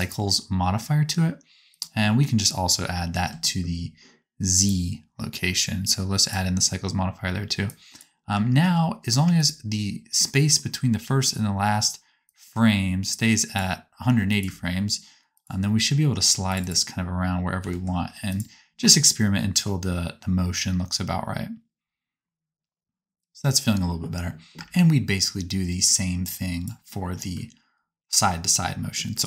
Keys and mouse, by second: 1.7-4.4 drag, 8.3 space, 9.1 space, 9.4-12.3 right drag, 14.3-15.3 drag, 14.3 space, 17.5 g, 22.5-26.2 drag, 24.5 space.